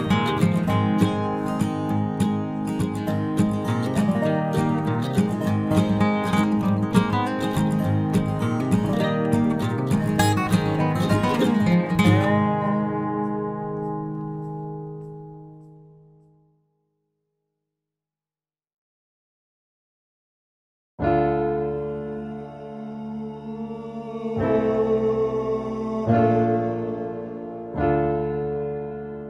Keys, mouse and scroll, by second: 1.1 r, 2.2 s, 3.9 g, 6.3 KP_Decimal, 7.1 click, 7.9 s, 9.0 Tab, 9.6 ctrl+Tab, 11.0 click, 11.6 s, 13.0 e, 16.6 e, 18.4 middle click, 20.1 e, 23.0 r, 24.0 e, 24.9 r, 25.7 e, 27.2 r, 28.7 middle click.